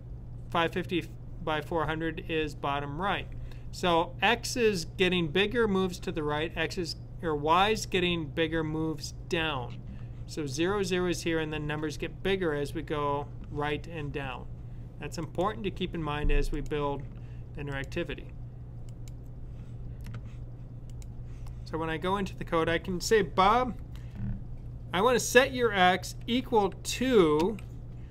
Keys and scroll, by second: 25.9 =.